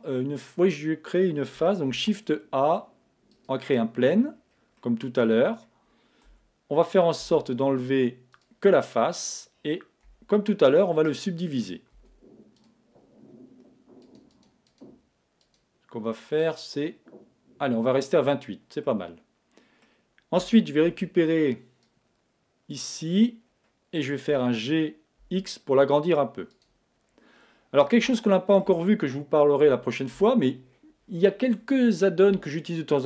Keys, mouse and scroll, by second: 1.9 shift+a, 4.4-4.8 scroll down 1, 4.8-6.3 middle drag, 6.3 Tab, 7.2 x, 9.2-11.0 middle drag, 10.1 a, 11.4-13.1 right drag, 12.0 w, 14.0-18.2 drag, 18.9-20.9 middle drag, 20.4 a, 20.9 b, 23.0-25.7 middle drag, 24.3 g, 26.6-28.3 drag, 27.1-29.7 middle drag, 29.7 a.